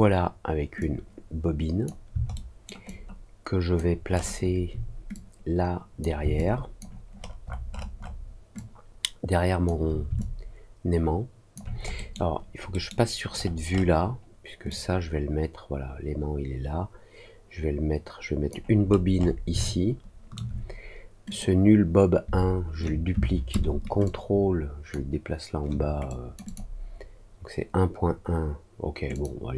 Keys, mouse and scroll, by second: 0.7-1.8 drag, 2.3 alt+middle click, 2.8 alt+click, 4.0 alt+middle click, 4.0-4.5 alt+scroll up 1, 5.1 click, 6.3 alt+click, 7.0 alt+middle click, 7.7 alt+middle click, 7.9 alt+middle click, 8.5-9.6 alt+drag, 10.1-11.5 alt+drag, 11.9 middle click, 12.6 middle click, 13.3-13.8 scroll up 2, 14.6-18.4 drag, 18.8-19.3 scroll up 2, 19.6 alt+middle click, 21.2 click, 24.0 ctrl+click, 26.0 click, 26.4 click, 29.1 click.